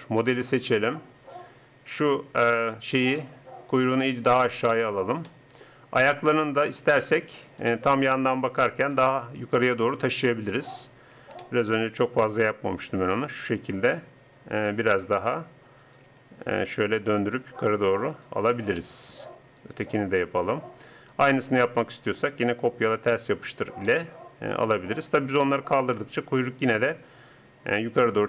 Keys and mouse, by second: 2.6-4.5 middle drag, 6.6-10.2 drag, 10.2 KP_3, 13.0 g, 16.1 r, 19.1-22.3 right drag, 25.8 middle click.